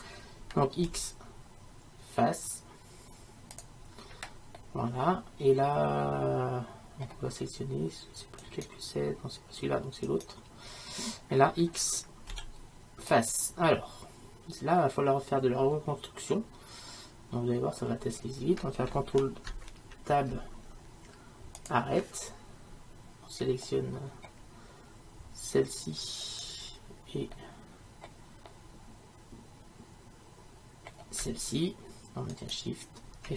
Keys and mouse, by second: 0.9 x, 4.6-8.5 middle drag, 8.5-12.0 right drag, 12.4 x, 20.2 ctrl+Tab, 26.3-33.3 right drag.